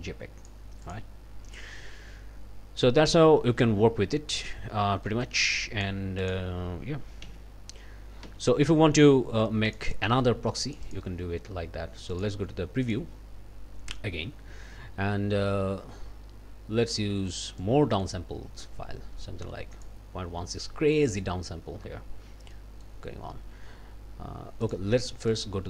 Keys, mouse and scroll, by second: 0.8 click, 5.1 middle click, 5.5 click, 6.2 click, 7.2 d, 8.2 d, 9.7 click, 10.7 click, 12.1 click, 12.8 click, 17.6-20.0 drag, 20.6 middle click, 21.3 scroll down 2, 21.7 scroll up 2, 22.5 middle click, 24.6 click, 25.3 click.